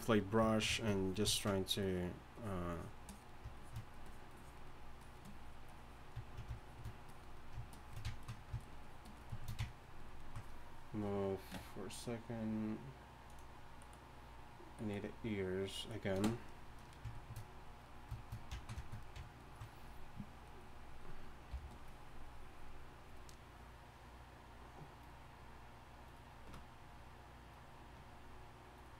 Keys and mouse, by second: 2.6 f, 8.1-17.2 drag, 17.3-20.0 middle drag, 20.6-24.7 drag, 21.5 f.